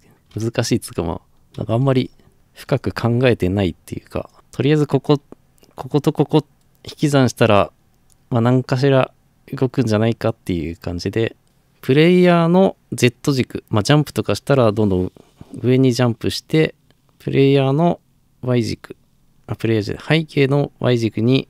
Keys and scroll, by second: 1.5 ctrl+c, 2.3 ctrl+v.